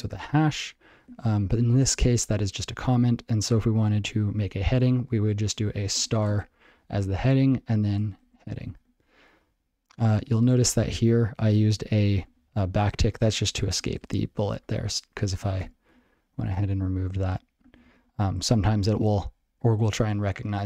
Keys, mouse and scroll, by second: 7.9-9.3 typing, 10.6 ctrl+n, 10.8 ctrl+n, 10.9 ctrl+n, 11.4 ctrl+space, 11.5 ctrl+n, 12.2 ctrl+p, 12.3 ctrl+n, 12.4 ctrl+p, 13.0 ctrl+g, 13.2 ctrl+a, 13.4 ctrl+n, 13.8 ctrl+p, 14.0 ctrl+space, 14.1 ctrl+n, 14.5 ctrl+g, 14.7 ctrl+p, 15.6 Tab, 16.3 ctrl+b, 16.5 ctrl+d, 17.3 ctrl+n, 17.6 ctrl+p, 17.9 ctrl+s, 18.4 ctrl+/.